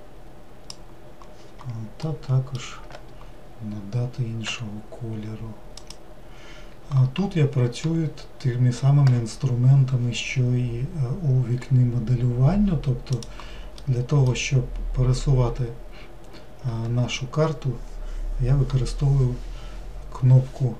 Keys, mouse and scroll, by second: 4.6 g, 13.3-20.7 drag.